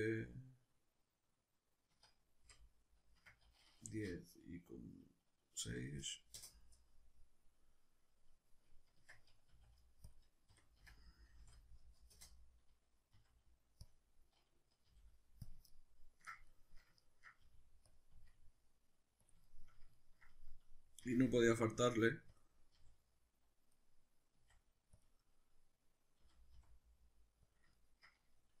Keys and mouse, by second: 9.0 Tab, 9.1-10.2 middle drag, 9.5 s, 10.2 click, 10.6 r, 12.3 Return, 13.2 s, 14.0 click, 14.9 g, 15.5 click, 15.7-17.6 ctrl+middle drag, 17.4 g, 18.0 click, 18.2 s, 19.4 click, 19.4-22.4 shift+middle drag, 21.0 r, 22.4 click, 22.8 g, 23.8 click, 24.4 s, 25.0 click, 25.2-27.5 middle drag, 26.2 g, 27.5 click, 27.7-28.6 ctrl+middle drag.